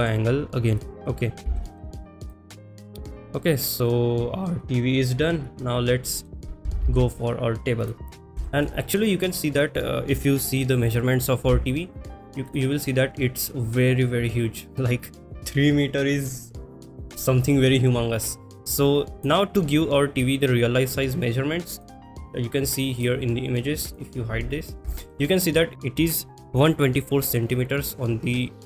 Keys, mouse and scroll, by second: 0.7 click, 1.6 shift+middle click, 2.0 middle click, 2.3 click, 3.1 click, 3.4-6.3 middle drag, 6.9 ctrl+s, 7.9 click, 8.4 shift+middle drag, 8.8 middle drag, 12.4 click, 12.4 n, 19.1 click, 21.7 click, 23.0 click, 23.8 click, 24.9 shift+middle click, 25.2 middle click.